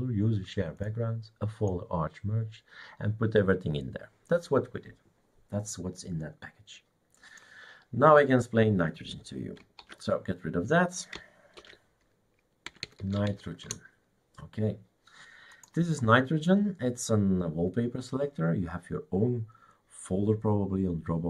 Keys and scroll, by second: 9.9 shift+super+q, 11.8 shift+super+d, 12.5-13.8 typing.